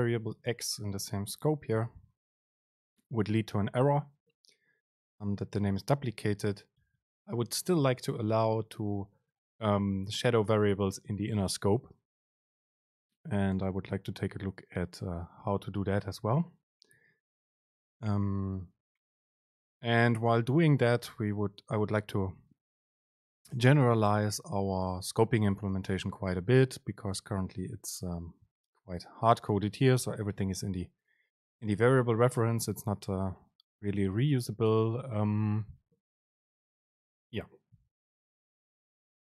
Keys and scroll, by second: 6.6 End, 7.0 BackSpace, 7.7 Down.